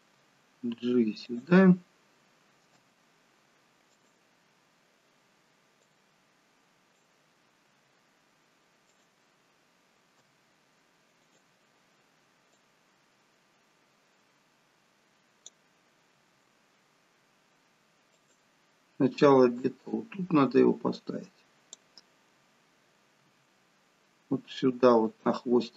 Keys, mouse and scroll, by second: 0.1 g, 2.8 i, 5.8 click, 7.7 g, 10.2 i, 12.6 click, 16.1 g, 19.6 click, 23.2 g.